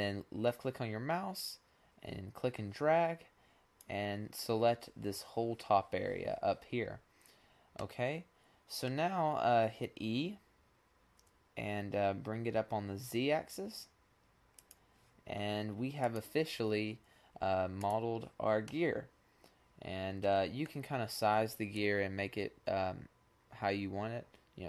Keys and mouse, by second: 6.9-9.3 middle drag, 9.6 e, 18.2-20.1 middle drag, 21.2-22.2 drag, 22.2 middle click.